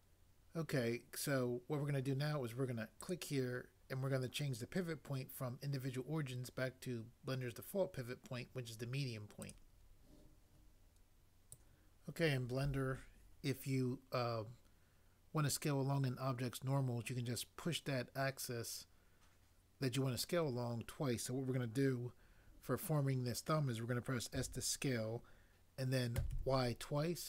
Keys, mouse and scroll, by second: 24.4 s, 26.1 typing.